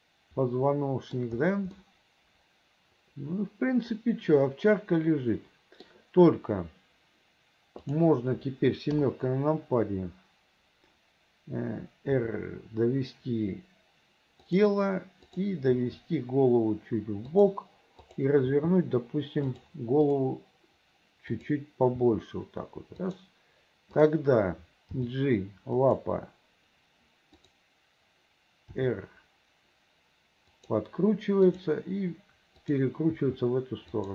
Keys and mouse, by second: 2.0-6.0 middle drag, 8.0 click, 9.0 KP_7, 14.6 r, 15.4 click, 15.8 r, 18.2 click, 18.6 r, 21.4 click, 22.1 r, 24.0 click, 25.1 g, 27.5 click, 28.8 r, 31.6 click, 32.8 click, 33.3 r.